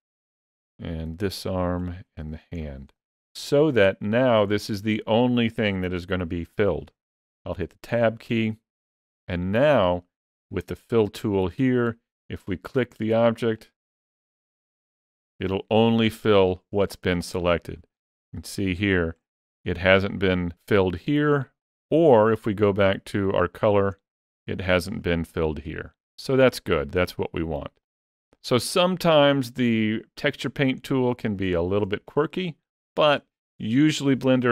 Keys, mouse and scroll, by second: 1.0 l, 1.3 middle click, 2.1 l, 2.4-2.8 scroll down 3, 2.8 middle click, 4.4 shift+middle click, 4.8 middle click, 7.1 Tab, 13.9 click, 17.5 scroll up 3, 17.8 shift+middle click, 18.4-18.7 scroll up 2, 18.7 shift+middle click, 21.4 click, 23.3-23.8 scroll up 3, 23.8 shift+middle click, 25.7 click, 28.2-29.6 scroll down 9, 29.6 shift+middle click, 30.2-30.6 scroll down 2, 30.6 shift+middle click, 31.8 shift+middle click, 32.2 shift+middle click, 33.0 shift+middle click.